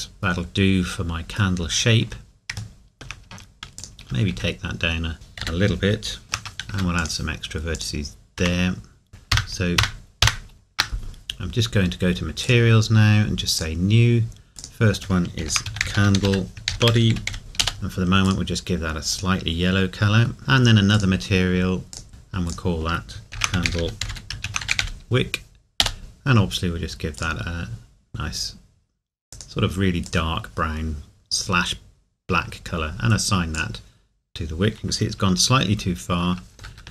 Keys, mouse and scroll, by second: 1.7 scroll up 1, 2.8 shift+middle click, 4.3 s, 5.1 right click, 6.2 shift+middle click, 6.7 ctrl+r, 9.3 ctrl+KP_Add, 16.6 typing, 24.3 typing, 33.5 click, 36.7 ctrl+r.